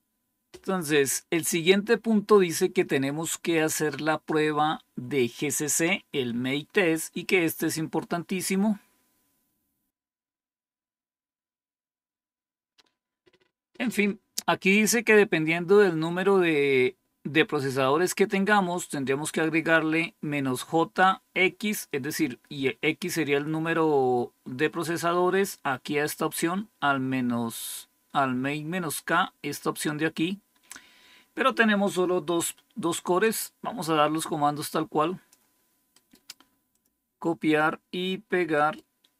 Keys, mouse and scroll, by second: 8.1 scroll down 2, 19.6-22.0 drag, 33.1 click, 33.7-35.2 drag, 35.8 right click, 36.6 click, 38.4 right click.